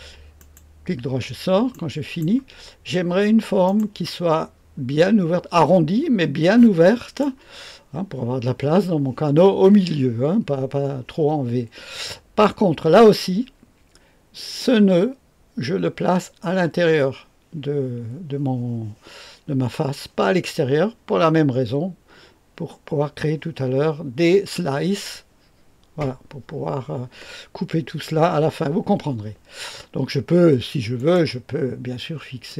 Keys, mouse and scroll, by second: 0.3 right click, 1.4-2.2 scroll up 1, 1.7 right click, 3.6 right click, 5.5-7.4 drag, 30.9 click, 32.4 click.